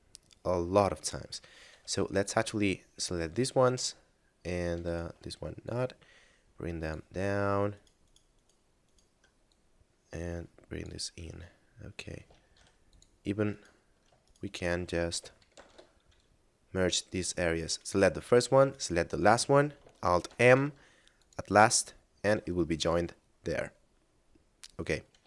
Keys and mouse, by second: 1.5 a, 2.3 ctrl+click, 4.8 shift+right click, 5.6 click, 7.6 shift+right click, 8.1 shift+right click, 8.3 shift+right click, 8.9 shift+right click, 9.4 click, 11.2 middle click, 12.5 ctrl+Tab, 12.8 click, 13.5 right click, 14.3 shift+right click, 15.5 alt+m, 17.1 click, 17.8 right click, 18.7 shift+right click, 20.3 alt+m, 21.1 click, 22.3 a, 24.1 middle click.